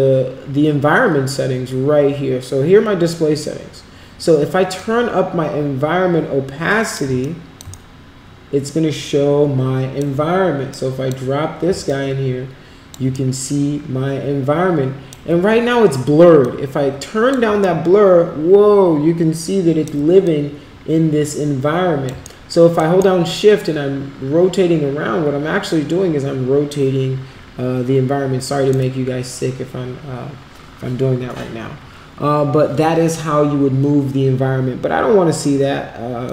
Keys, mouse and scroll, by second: 4.7-6.9 drag, 7.2 alt+click, 7.7-9.9 shift+right drag, 10.7 click, 11.8-12.9 alt+drag, 13.1-15.1 shift+right drag, 16.4-17.3 drag, 17.6-19.9 shift+right drag, 20.2-22.0 alt+drag, 22.3 shift+right click, 23.0-28.7 shift+right drag, 36.2-36.3 drag.